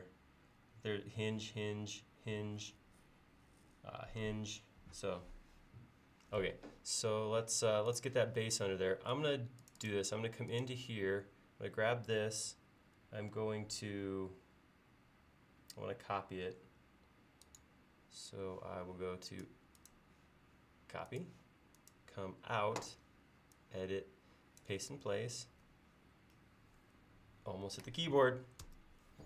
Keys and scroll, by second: 28.7 f.